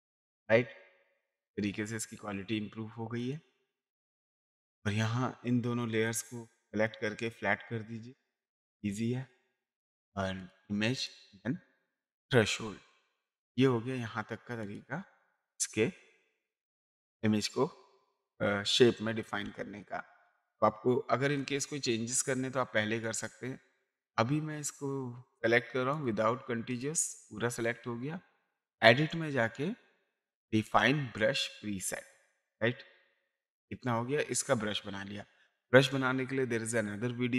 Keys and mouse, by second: 0.8 click, 2.1 space, 2.3 ctrl+right click, 3.2 ctrl+click, 3.8 click, 4.1 click, 5.9 ctrl+click, 6.8 right click, 9.3 click, 10.4 click, 13.4 click, 14.6 click, 19.4 space, 20.4 click, 20.5 typing, 23.0 click, 25.9 click, 28.6 click, 30.7 click, 32.3 click.